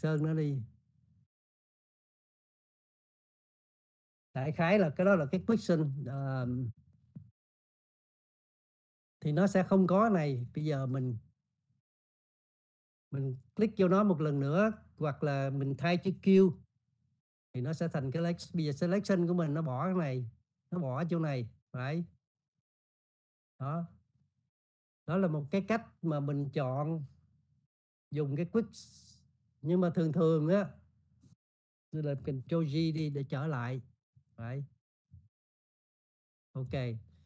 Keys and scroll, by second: 17.4 q, 33.4 ctrl+z.